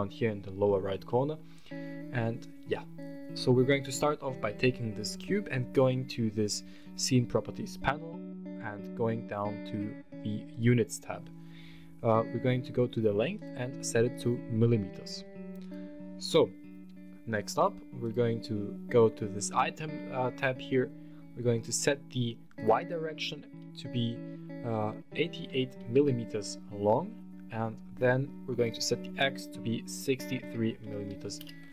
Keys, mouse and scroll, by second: 0.8 middle drag, 3.6 right click, 6.5 click, 10.3 click, 13.1-15.5 drag, 17.8 click, 22.3-26.3 drag, 25.3 KP_8, 28.4-31.6 drag.